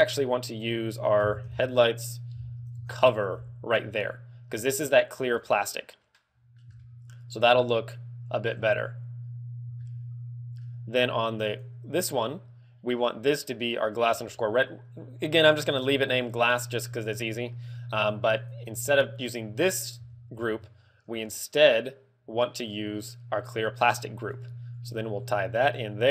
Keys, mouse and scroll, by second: 4.5 click, 5.9 middle click, 6.7 shift+middle click, 8.7 scroll up 1, 9.3 scroll down 2, 9.7 ctrl+middle click, 11.5 click, 17.6 click, 18.3 click, 19.7 click, 19.9 x, 20.4 shift+a, 24.4 g, 24.8 click, 25.4 click.